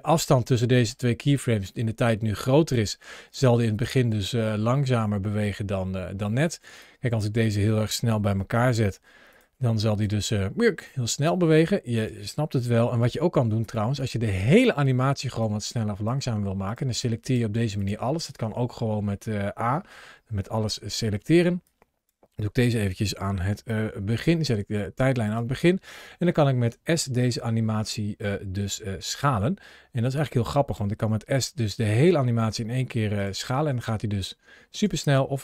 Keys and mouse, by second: 0.0 ctrl+shift+a, 3.2-3.7 drag, 3.8 space, 6.4 space, 6.8 click, 8.2 g, 9.1 click, 9.6 drag, 10.0 space, 10.9 space, 11.0 click, 12.4 g, 13.4 click, 13.8 click, 15.4-16.0 drag, 16.5 click, 16.9 click, 20.2 a, 21.5-22.0 drag, 25.2 drag, 29.7 s, 33.0 click, 33.5 space, 34.5 space.